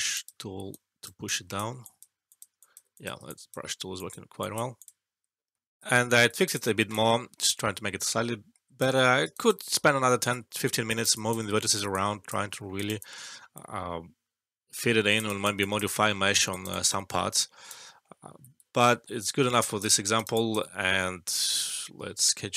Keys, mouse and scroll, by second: 0.6-1.5 right click, 1.2 click, 5.4 alt+`, 5.5 alt+F12, 5.9 alt+middle click, 6.4-9.1 alt+drag, 9.2 alt+right click, 9.6 alt+middle click, 10.8 alt+right click, 11.1 alt+click, 11.9-15.1 alt+click, 12.4 alt+middle click, 12.7 alt+right click, 12.9 alt+click, 15.2 alt+right click, 15.6 alt+click, 16.4 alt+right click, 16.6 alt+click, 17.3 alt+right click, 17.8 alt+middle click, 19.2-19.8 alt+click, 19.9 alt+middle click, 20.1 alt+right click, 20.3 alt+click, 21.2-22.2 right drag.